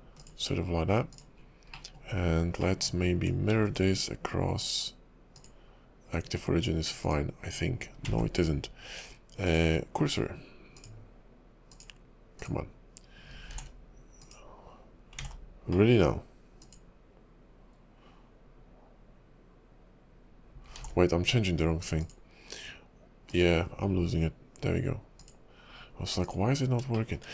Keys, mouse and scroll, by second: 0.2 click, 1.1 click, 1.4 scroll down 1, 1.7 middle click, 2.6 middle click, 3.6 alt+x, 4.6 click, 7.3 click, 8.2 ctrl+z, 9.4 click, 11.7 click, 13.5 alt+x, 14.5 click, 15.3 ctrl+z, 15.8 middle click, 16.6 click, 20.8 alt+x, 22.0 click, 25.5 click, 25.9-27.0 scroll up 4, 26.4 click.